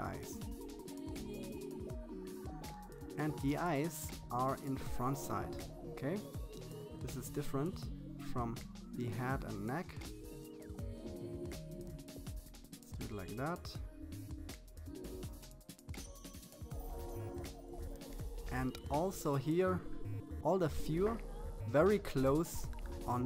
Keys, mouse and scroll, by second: 0.3-0.8 scroll up 1, 1.9-3.9 drag, 7.6-9.7 drag, 11.8-13.9 drag, 16.5-17.7 drag, 18.0 click, 18.5 KP_7, 18.9 click, 19.5 click, 20.6 click, 21.1 middle click, 21.4 middle click, 22.1 click, 22.8 click.